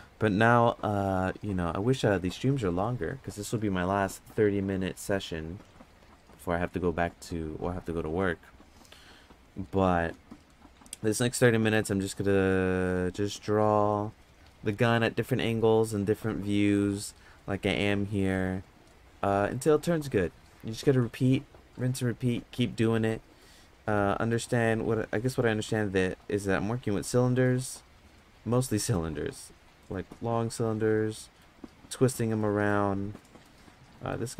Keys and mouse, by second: 24.0 middle click, 27.4 middle click, 28.6 middle click, 29.8 middle click, 31.1 middle click, 32.4 middle click, 33.1 middle click, 34.1 middle click.